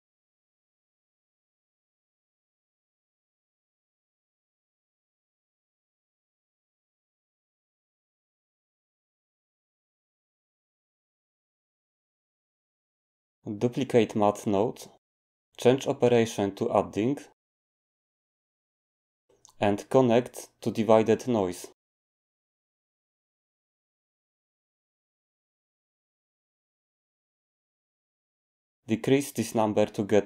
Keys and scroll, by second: 0.0-1.3 typing, 14.1 d.